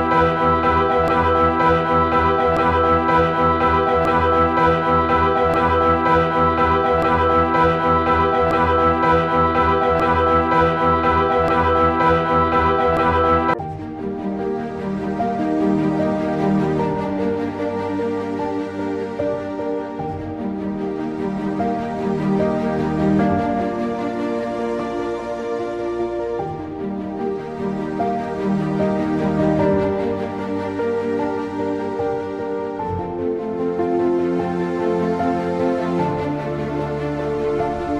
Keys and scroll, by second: 0.3 typing, 2.0 typing, 3.6-4.8 typing, 6.3-7.0 typing, 8.6 ], 10.5 /, 14.1 /, 17.3-23.8 typing, 25.4-26.1 typing, 27.5-36.4 typing.